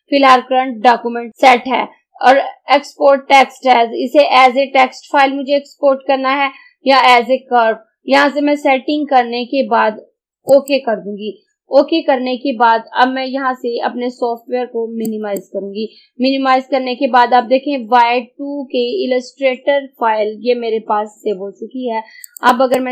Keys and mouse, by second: 10.6 click, 15.2 click, 22.3 click.